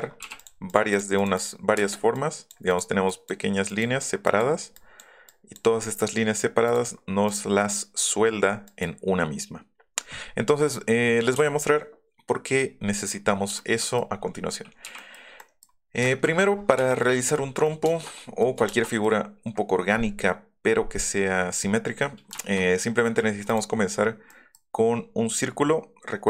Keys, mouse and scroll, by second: 0.4 click, 0.4 l, 0.7 click, 0.9 click, 1.2 click, 1.4 click, 2.1 click, 2.7 click, 6.6 click, 7.3 click, 8.4 click, 8.7 click, 11.3 Delete, 13.6 shift+middle click, 14.0 middle click, 14.1 scroll up 1, 14.2 middle click, 14.7 click, 14.8-15.9 scroll up 6, 14.9 l, 17.6 middle click, 19.3 middle click, 19.3 scroll up 4, 22.3 shift+middle click, 23.5 click, 24.3 click.